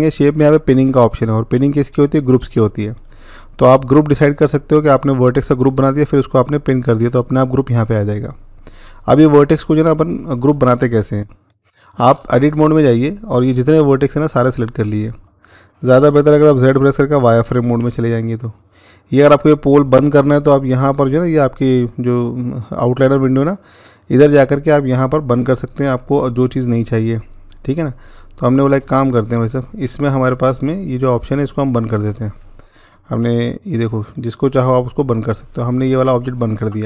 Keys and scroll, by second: 16.6-17.6 z.